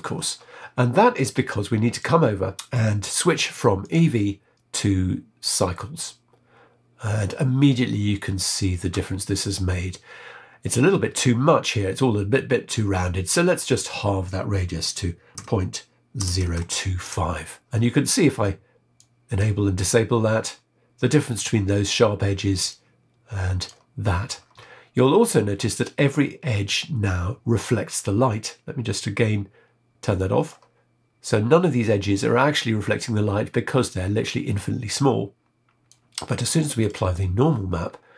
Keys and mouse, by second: 1.9 click, 3.9-5.6 drag, 13.4-17.1 drag, 18.9 click, 22.6-23.7 drag, 30.1 click, 35.8-36.8 drag.